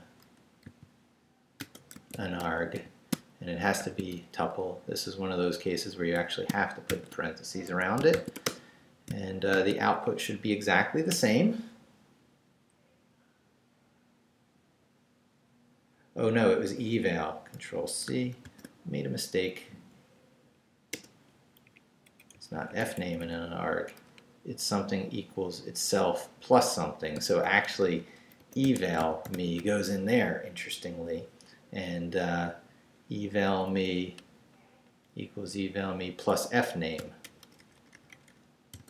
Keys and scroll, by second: 0.6 ,, 1.7-3.8 typing, 4.4 shift+Left, 5.0 Left, 6.1 Left, 6.9-9.5 typing, 7.6 shift+Escape, 9.1 shift+Return, 10.0 shift+Up, 11.1 Return, 18.4 ctrl+c, 20.9 Return, 21.6 Down, 22.1 Up, 22.3 Right, 27.2-29.8 typing, 33.3 Right, 35.3 Left, 35.5 Right, 37.0 i, 37.2 BackSpace, 38.7-38.8 typing.